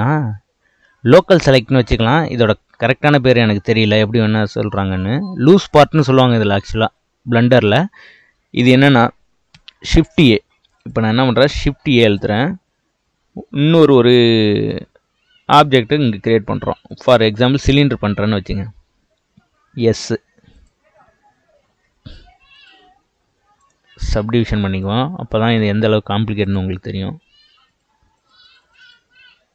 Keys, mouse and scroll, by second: 10.8 click, 11.8 shift+a, 19.0 s, 21.7 g, 23.6-26.4 right drag, 26.4-29.5 drag.